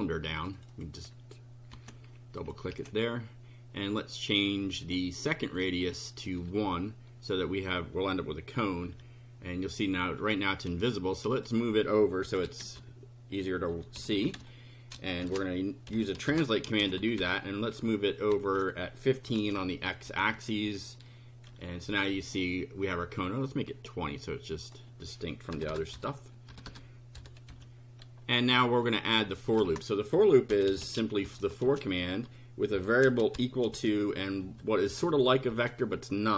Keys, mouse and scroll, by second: 0.4 click, 1.7 ctrl+c, 2.4 ctrl+click, 2.7 ctrl+v, 5.2 click, 6.4 1, 8.8 F5, 11.3 click, 12.0-16.8 typing, 18.3-20.3 typing, 21.5 F5, 22.8 click, 24.2 click, 25.5-27.1 typing, 27.5 F5, 28.8 click, 29.6 Return, 30.3-31.7 typing, 32.7-34.9 typing, 35.5 Left.